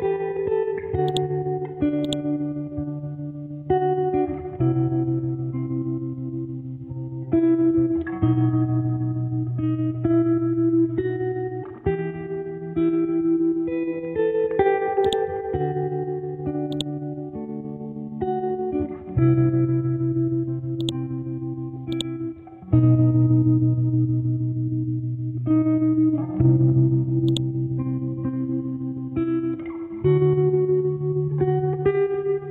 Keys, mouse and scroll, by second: 1.1 shift+click, 10.2 scroll down 1, 12.2-13.7 scroll up 1, 15.1-19.0 drag, 19.0 ctrl+x, 19.3-20.0 scroll down 1, 20.0-20.3 scroll up 1, 20.4 ctrl+z, 20.8-23.6 drag, 23.6 ctrl+x, 24.2-25.7 scroll down 1, 26.0 scroll up 1, 27.3 click, 27.8 ctrl+v, 31.9 scroll down 1.